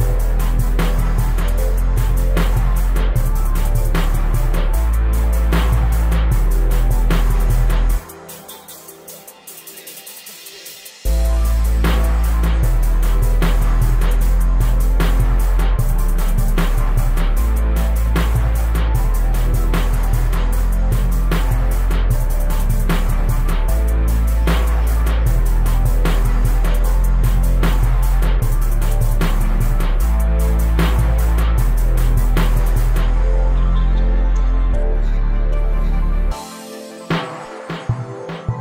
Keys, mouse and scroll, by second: 0.3-2.0 right drag, 3.4-4.8 shift+right drag, 5.0-6.2 middle drag, 6.2-10.6 drag, 10.6 KP_0, 10.7 scroll down 1, 10.9 shift+middle click, 11.0-11.5 scroll up 1, 11.5 Tab, 11.8-12.6 right drag, 12.6 s, 13.7 click, 15.2 click, 15.4-16.5 right drag, 16.5 Tab, 16.8 right click, 17.2 ctrl+l, 18.3 click, 18.7 Tab, 18.9-20.0 right drag, 20.0-20.4 scroll up 5, 20.6 g, 21.4 right drag, 21.6 g, 22.7 right drag, 22.8 scroll down 1, 23.1 scroll up 1, 23.3 scroll down 1, 23.6 shift+middle click, 23.9 right click, 24.4-25.6 shift+middle drag, 25.6-26.1 scroll up 8, 25.8 middle click, 26.1 shift+middle click, 26.4 right click, 26.7 shift+d, 28.0 right click, 28.1 scroll down 1, 28.2 middle drag, 28.3 scroll up 1, 28.4 shift+middle drag, 28.6 scroll down 1, 28.8 scroll up 1, 28.9 right click, 29.1 s, 30.9 right drag, 31.1-31.4 scroll down 1, 31.4 middle click, 31.6 scroll up 2, 31.7 scroll down 1, 31.8-32.2 middle drag, 32.2 KP_0, 32.4 scroll down 1, 32.5 scroll up 1, 34.2 right click, 34.5 a, 34.6 a, 37.1-38.6 drag.